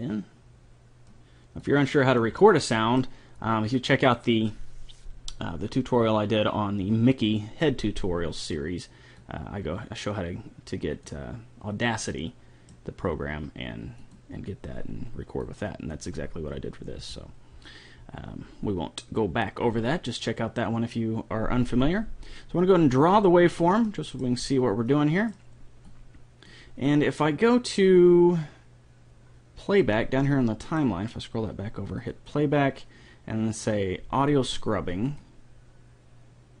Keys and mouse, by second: 0.8 click, 1.6 click, 2.4 middle click, 9.2-10.8 drag, 10.8 click, 12.1 middle click, 14.0-17.2 drag, 23.0-24.8 drag, 24.8 middle click, 26.0-27.4 drag, 30.3-31.7 middle drag, 32.1-34.0 drag, 35.1-36.6 drag.